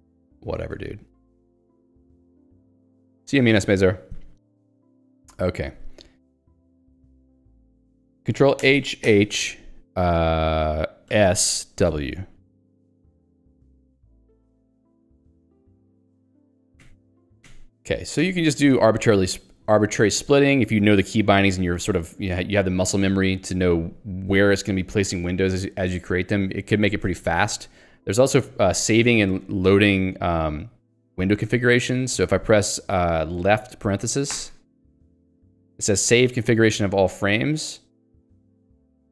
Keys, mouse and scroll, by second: 0.4 ctrl+g, 1.6 Escape, 11.1 s, 12.0 w, 16.8 ], 18.2 [, 36.3 (.